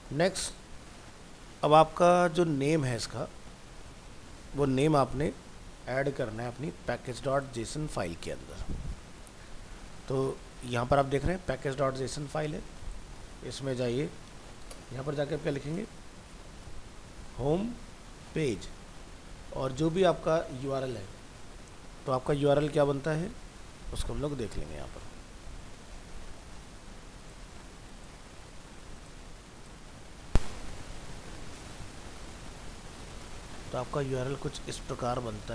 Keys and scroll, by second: 21.4 alt+Tab.